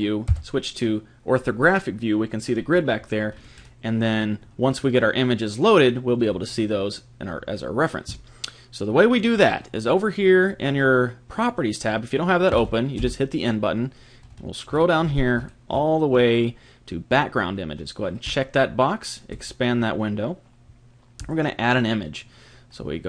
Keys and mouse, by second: 0.3 KP_5, 3.3-6.7 middle drag, 12.5 n, 12.9 n, 14.2-18.3 middle drag, 18.3-21.1 drag, 21.2 click, 23.0 click.